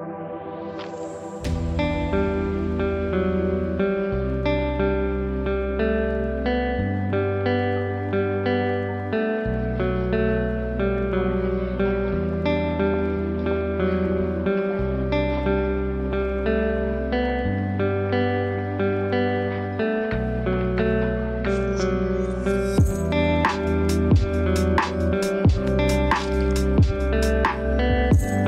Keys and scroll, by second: 3.7 ctrl+g, 12.0 ctrl+space, 13.2 ctrl+z, 15.1 ctrl+g, 18.6 ctrl+space.